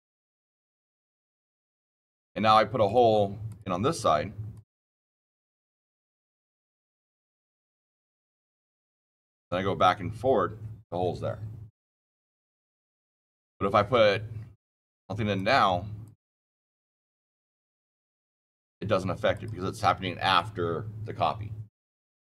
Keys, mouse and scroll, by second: 0.6 click, 1.6 click, 2.8 click, 3.4 click, 4.4 click, 6.1 click, 9.3 click, 15.3 click, 15.9 click, 17.1 click, 17.7 click, 19.2 click.